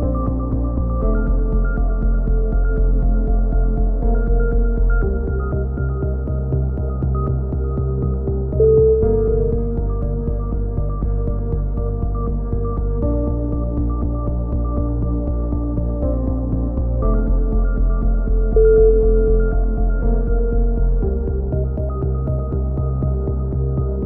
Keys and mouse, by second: 0.0 right click, 0.5 alt+m, 0.7 right click, 1.2 alt+m, 1.3 a, 1.4 click, 2.4 click, 2.4 right click, 2.9 KP_3, 3.4 e, 3.7 click, 5.0 click, 5.0 a, 5.1 z, 5.3 click, 6.4 click, 6.6 click, 8.1 click, 8.2 KP_3, 8.8-9.9 middle drag, 9.5 click, 9.9 click, 10.2 click, 10.5 middle click, 11.5 a, 11.8 z, 12.1-14.7 drag, 15.2 g, 17.1-18.4 drag, 18.4 Tab, 18.8 Tab, 19.0 Tab, 19.7 click, 19.9 shift+s, 21.6 click, 22.5 shift+s, 22.9 Tab.